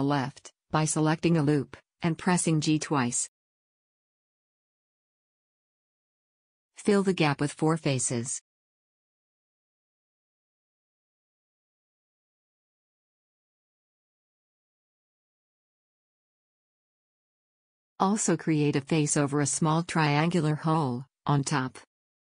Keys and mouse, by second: 1.8 a, 2.5 click, 3.2 g, 5.7-7.2 drag, 6.8 a, 8.9 f, 9.2 a, 11.8 f, 11.9 a, 14.1 f, 14.3 a, 17.3 f.